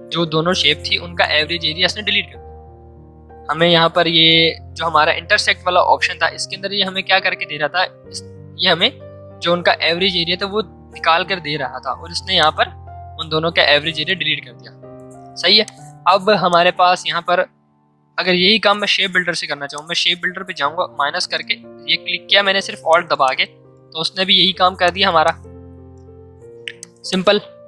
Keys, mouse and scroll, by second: 12.3-14.0 drag, 14.0 ctrl+z, 15.6-19.3 drag, 19.7 click, 22.1 v, 22.8 click, 24.4 ctrl+z, 24.8-27.6 drag.